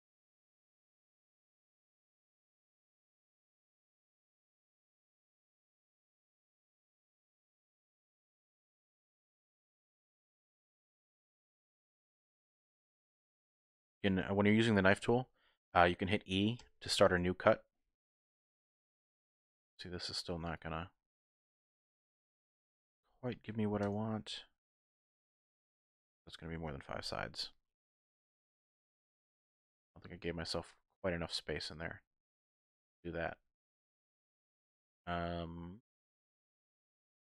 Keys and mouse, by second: 0.3 k, 4.6 k, 8.3 shift+click, 9.4 click, 10.7 k, 24.4 click, 27.0 ctrl+z, 27.1 ctrl+z, 28.7 shift+click, 29.5 click, 30.4 ctrl+z, 31.0 click, 32.0 shift+middle click, 32.9 shift+middle click, 33.7 middle click, 34.2 shift+middle click, 35.1 middle click, 36.1 shift+middle click, 36.9 KP_1.